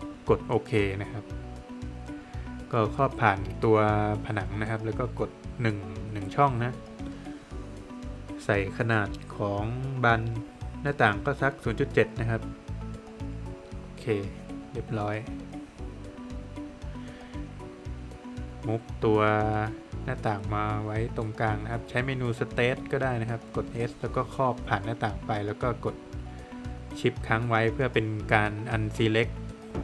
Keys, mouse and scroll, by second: 2.0 click, 5.7 Return, 10.7 Return, 13.0 Return, 15.2 space, 15.8 Escape, 16.6 scroll up 1, 17.0 Escape, 18.0 click, 20.0 Escape, 20.2 Escape, 21.0 space, 22.2 click, 23.6 click, 25.0 shift+click, 25.6 space, 25.8 click, 27.1 Return, 27.8 Escape, 28.1 click, 28.5 double click, 29.3 space, 29.7 click.